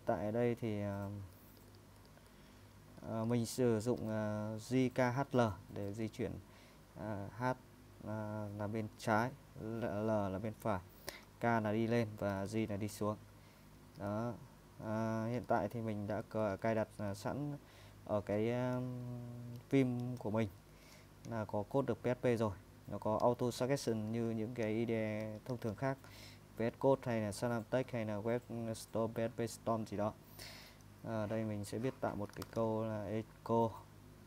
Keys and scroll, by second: 0.0-1.6 typing, 2.8 typing, 4.0-5.9 typing, 8.3 typing, 9.6-17.5 typing, 24.1 a, 25.1 Tab, 25.4 Tab, 25.6 Tab, 25.8 Tab, 31.9-33.1 typing.